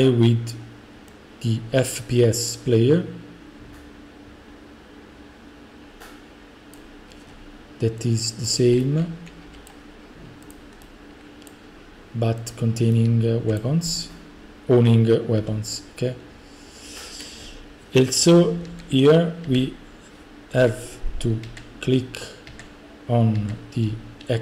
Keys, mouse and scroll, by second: 6.8 click, 8.5 click, 8.6-10.9 typing, 9.7 right click, 10.5 click, 11.5 right click, 12.5 click, 12.9-13.9 typing, 13.6 right click, 14.5 right click, 15.4 F5, 17.5-19.5 typing, 21.2-23.8 typing.